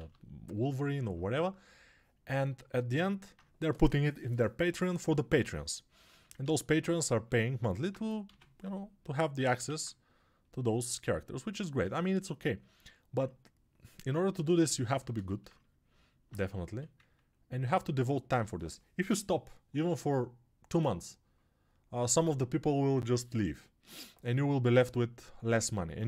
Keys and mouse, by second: 8.2 x, 9.6 alt+q, 16.5 1.